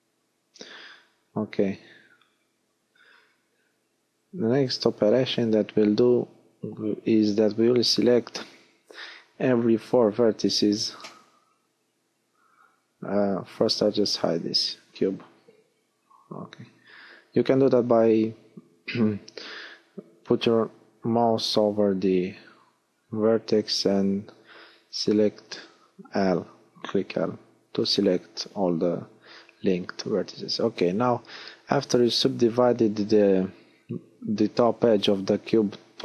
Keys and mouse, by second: 4.8-8.6 drag, 10.9 l, 14.4 h, 20.2 w, 21.1 w, 25.4 f, 27.8 shift+f, 29.3 middle click, 30.8 f, 32.6 ctrl+z, 33.9 f.